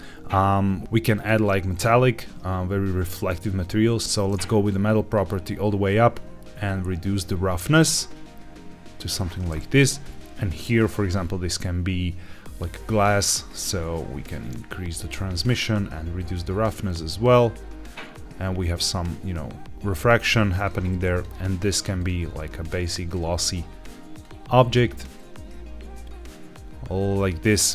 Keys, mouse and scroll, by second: 0.8 ctrl+z, 1.0 click, 1.6 click, 3.5 click, 4.6 click, 6.6-9.0 drag, 9.7 click, 11.1-12.8 scroll down 2, 13.4 click, 14.2 click, 15.3-16.2 scroll up 2, 16.2-20.6 drag, 21.1 click, 21.9 click, 22.5 click, 25.1-27.7 drag.